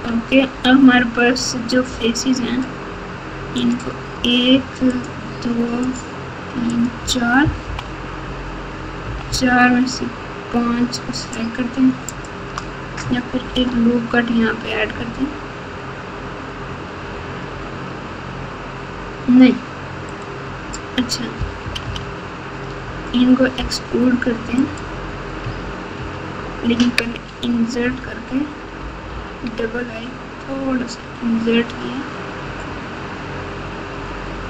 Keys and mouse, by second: 1.8 3, 3.6 click, 4.9 shift+click, 5.9 shift+click, 6.7 shift+click, 7.6 KP_4, 9.0 KP_4, 9.2 KP_4, 12.2 shift+click, 13.4 ctrl+r, 21.6 KP_6, 21.8 KP_6, 23.5 e, 25.9 ctrl+z, 28.8 i.